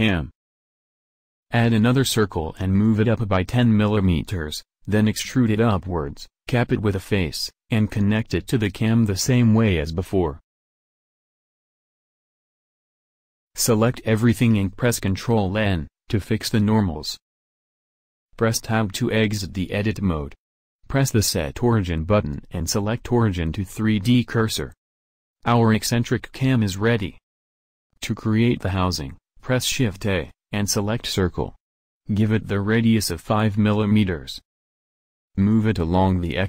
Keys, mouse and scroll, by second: 2.7 a, 4.2 g, 6.2 e, 8.2 f, 8.8 a, 9.7 a, 11.9 w, 13.8 a, 13.9 a, 14.7 ctrl+n, 18.5 Tab, 28.4 shift+a, 31.6 g.